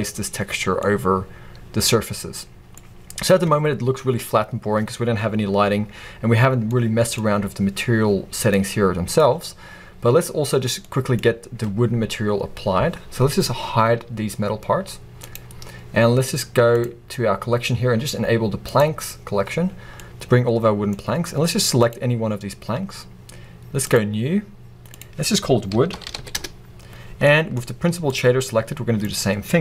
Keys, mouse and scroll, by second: 0.5 scroll down 1, 8.5-9.7 drag, 9.7-10.7 scroll down 2, 10.7 scroll down 1, 10.8-13.3 middle drag, 11.2-12.4 scroll up 2, 12.4-13.2 scroll up 1, 13.2-14.0 scroll up 1, 14.0-14.9 scroll up 1, 14.9-15.3 scroll up 1, 15.3-15.7 drag, 18.7 click, 19.7 scroll down 1, 20.0-20.9 middle drag, 20.9-21.5 scroll up 2, 21.5-21.9 scroll up 1, 21.9 click, 22.3-23.0 scroll down 1, 23.0 scroll up 1, 23.9-29.6 drag, 26.3 o, 26.5 Return.